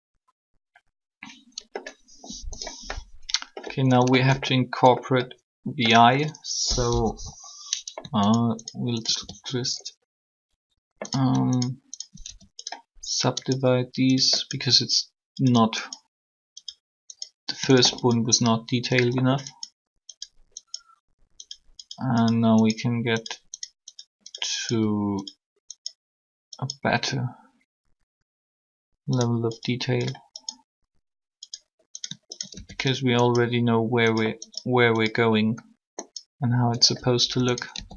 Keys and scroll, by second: 6.6 1.